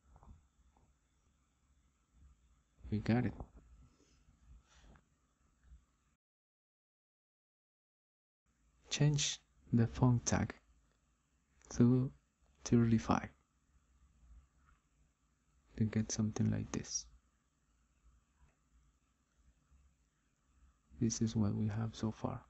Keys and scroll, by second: 16.5 3, 18.9 Return.